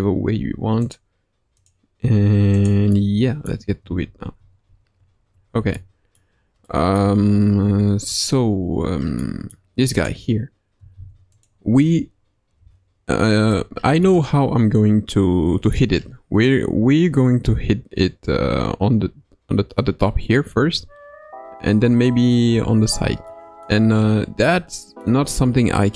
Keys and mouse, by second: 0.3 r, 1.9 r, 3.0 middle click, 4.3 ctrl+z, 4.6 ctrl+z, 4.9 ctrl+z, 5.3 ctrl+z, 5.7 middle click, 6.6 middle click, 7.0 Tab, 7.5 Tab, 9.2-9.5 middle drag, 10.0-10.7 drag, 10.9 ctrl+Tab, 11.3 click, 12.5 KP_Decimal, 13.2-13.5 middle drag, 14.0-15.7 middle drag, 23.3-23.6 middle drag, 24.4-25.0 middle drag.